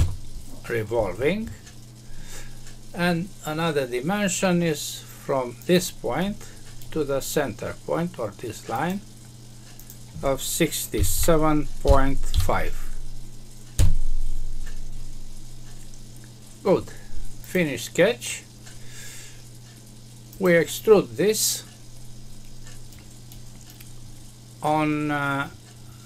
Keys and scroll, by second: 13.7 Return.